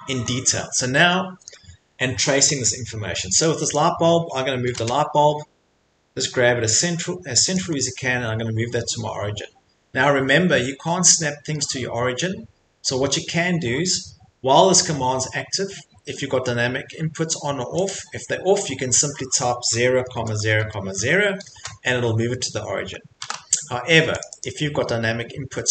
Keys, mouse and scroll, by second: 0.1 middle click, 3.0 middle click, 3.4 click, 3.8 click, 4.0 scroll, 4.0 middle click, 4.7 m, 5.2 middle click, 5.3 middle click, 5.4 middle click, 5.4 middle click, 7.5 click, 7.8 middle click, 8.0 middle click, 10.6 middle click, 13.8-15.7 middle drag, 17.9-19.5 drag, 19.5-21.5 typing, 21.5 Return, 23.2 ctrl+z, 24.2 click, 24.4 click.